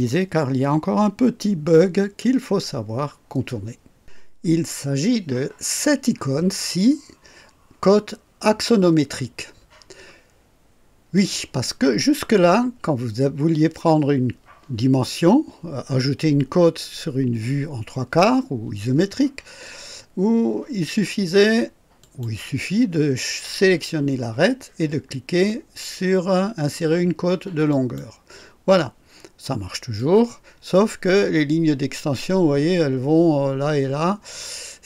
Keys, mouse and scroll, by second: 11.1 click, 22.0 click, 27.7 click, 29.9-34.8 drag.